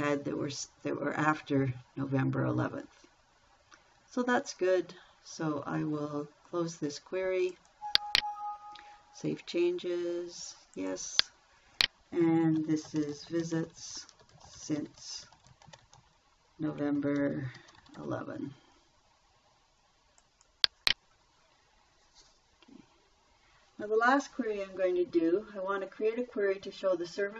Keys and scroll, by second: 13.1-18.2 typing.